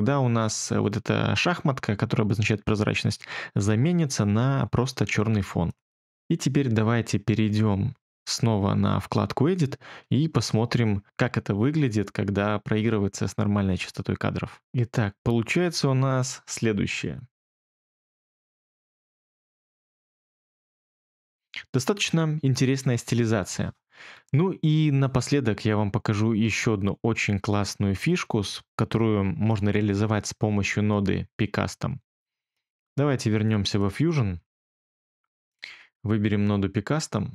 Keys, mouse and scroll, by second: 23.9 space.